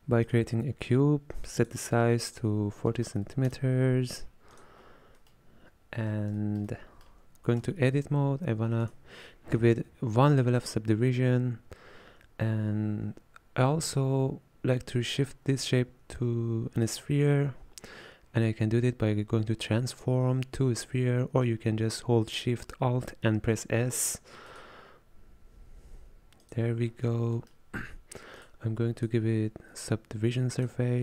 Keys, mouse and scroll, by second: 1.6-5.2 drag, 5.2-5.7 middle drag, 5.7-6.4 scroll up 5, 6.4-7.7 shift+middle drag, 7.7 Tab, 8.9-16.9 right drag, 16.9-27.4 drag, 27.4-29.0 middle drag, 30.7-31.0 drag.